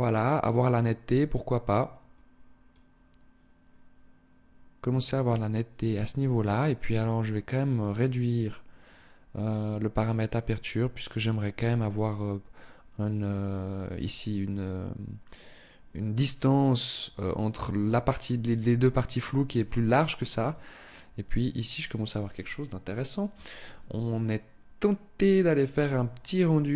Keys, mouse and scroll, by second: 1.5 click, 6.5 click.